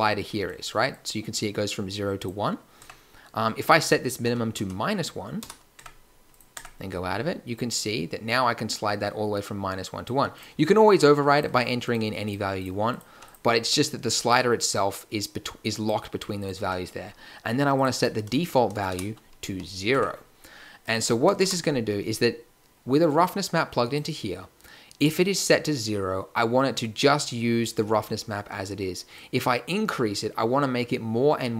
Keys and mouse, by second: 2.8 Tab, 5.7 Tab, 6.5 Tab, 8.8 middle click, 13.3 middle click, 16.6 Tab, 19.4 n, 19.9 Tab, 25.1-29.1 middle drag.